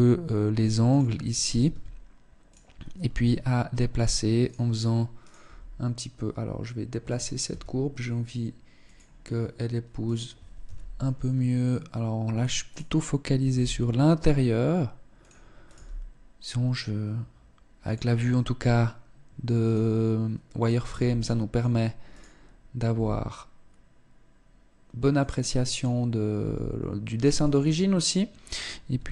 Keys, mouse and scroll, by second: 0.8 right click, 1.3 s, 2.5 g, 4.7 right click, 4.9 g, 7.0 s, 9.5 right click, 10.1 z, 12.2 right click, 13.1 g, 14.7 g, 19.1 right click, 20.0 right click, 20.5 g, 21.6 right click, 22.5 g, 25.3 right click, 26.0 g, 26.9 Tab, 28.5 z.